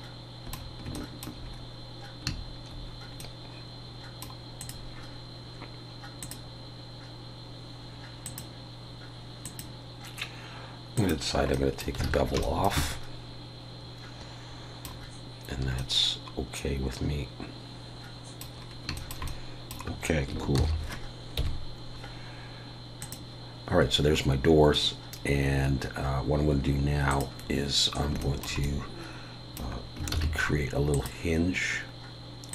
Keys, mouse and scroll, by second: 0.9 shift+middle click, 2.2-3.2 scroll down 3, 3.2 middle click, 4.6 click, 6.2 click, 11.5 middle click, 12.1 alt+a, 12.4 shift+middle click, 12.8 middle click, 18.5 scroll down 3, 18.9 shift+scroll up 1, 19.0 shift+middle click, 19.3 middle click, 20.6 ctrl+s, 21.4 KP_1, 23.0 click, 27.1 click, 28.2 shift+middle click, 28.6 middle click, 30.1 shift+a.